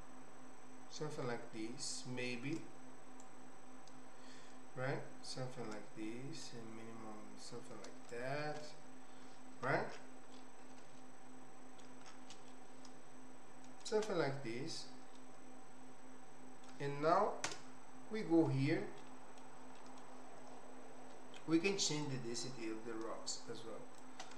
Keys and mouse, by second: 3.2-6.0 shift+drag, 6.4-8.3 shift+drag, 10.4-11.8 middle drag, 12.6-13.9 shift+middle drag, 15.3-16.7 middle drag, 17.4 KP_0, 19.0 middle click, 19.8 middle click, 22.0-24.1 shift+drag.